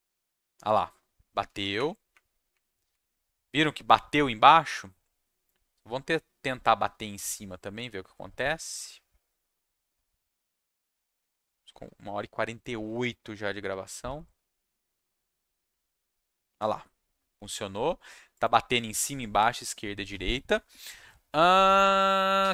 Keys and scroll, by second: 1.5 Down, 1.7 Up, 2.5 Up, 6.1 Down, 7.0 Down, 13.6 Down, 14.0 Down, 14.5 Down, 14.8 Down, 15.6 Up.